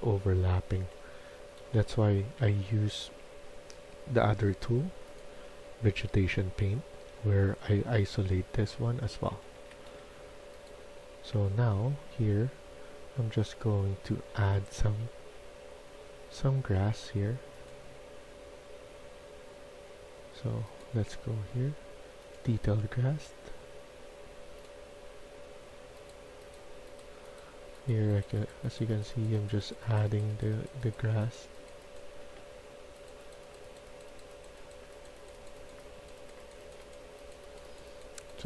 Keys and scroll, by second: 0.0-2.3 typing, 8.8-10.2 typing.